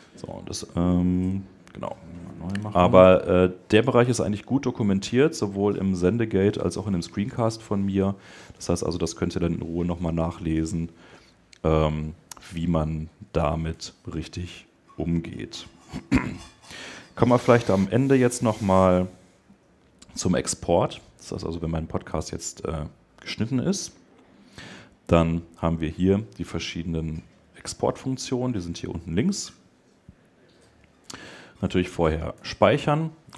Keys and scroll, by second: 13.5 Escape.